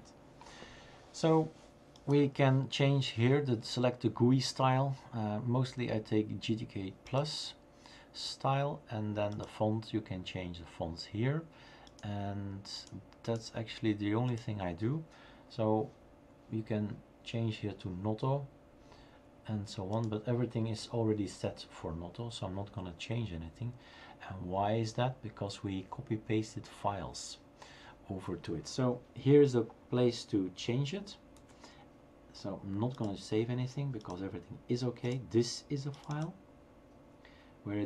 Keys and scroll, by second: 31.4 shift+super+q.